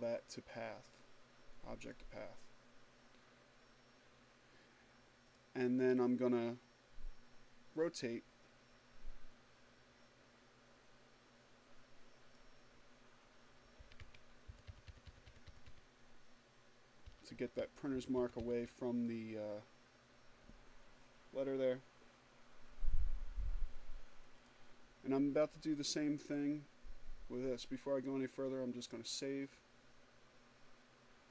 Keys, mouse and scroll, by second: 0.4 click, 3.9 click, 6.5-11.5 drag, 12.3 Up, 12.9 Left, 15.4 Up, 16.3 Left, 16.7 Left, 22.9 click, 28.1 click.